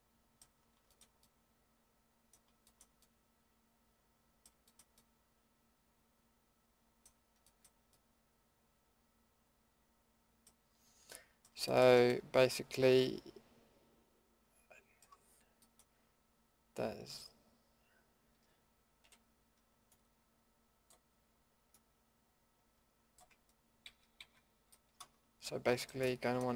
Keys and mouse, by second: 0.9-2.7 middle drag, 3.4-3.8 middle drag, 4.0 middle drag, 6.1-8.6 middle drag, 10.5-11.3 middle drag, 11.4-11.8 middle drag, 12.1 middle click, 12.4-12.7 middle drag, 12.7-14.0 middle drag, 14.7 middle click, 15.0-15.6 middle drag, 19.0 l, 23.8 ctrl+z, 24.2 ctrl+z, 26.3-26.5 middle drag.